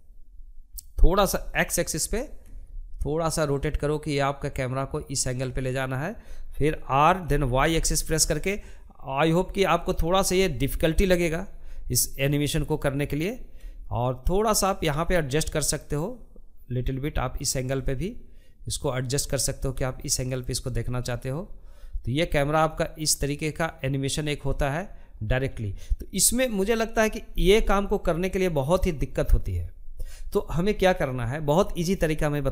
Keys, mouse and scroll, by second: 5.7 r, 14.2-21.1 shift+middle drag, 21.1-25.4 drag.